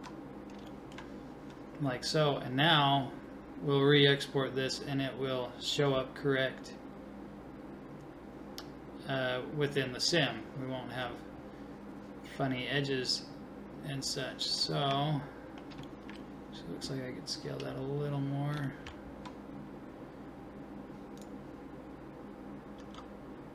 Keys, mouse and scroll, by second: 0.7-3.1 middle drag, 12.3-14.0 middle drag, 14.0-15.1 scroll down 1, 15.1-15.9 scroll down 1, 15.9-21.2 middle drag, 21.2-23.5 right drag, 22.8 s.